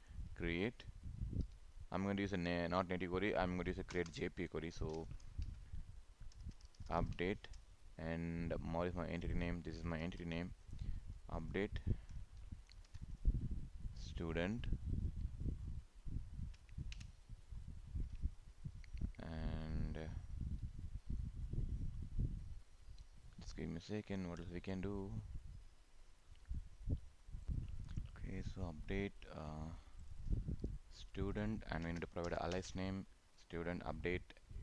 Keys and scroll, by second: 10.0 ctrl+c, 13.0 ctrl+v.